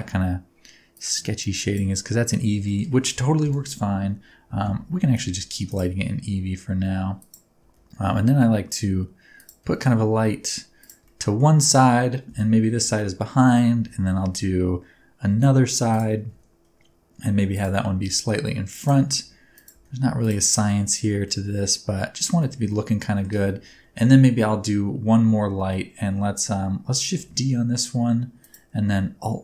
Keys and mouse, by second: 1.0 click, 3.4 KP_1, 5.0 shift+d, 5.6 click, 5.9 r, 7.1 click, 7.6 g, 9.3 click, 9.7 shift+middle click, 10.8 click, 11.0-11.5 middle drag, 12.2 KP_7, 13.2 shift+drag, 15.3 shift+d, 15.8 click, 16.2 r, 17.5 click, 17.9 g, 18.7 click, 19.1 r, 19.5 click, 19.7 g, 20.2 click, 20.5 shift+middle click, 20.9 middle click, 21.3-21.7 middle drag, 22.4 middle click, 22.8-23.3 middle drag, 23.9 KP_1, 25.7 middle click, 27.1 shift+d, 28.4 click.